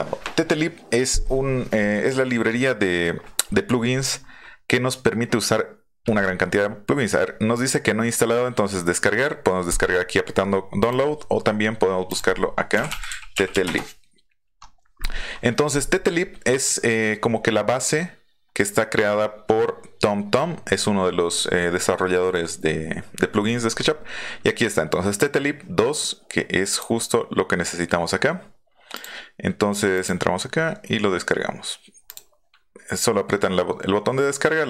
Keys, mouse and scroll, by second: 10.8 click, 12.1 click, 12.7 t, 13.3 i, 13.6 Return, 16.8-17.1 scroll down 4, 17.1-17.5 scroll up 2, 26.7 click, 28.9 click, 29.9 click, 32.0 click.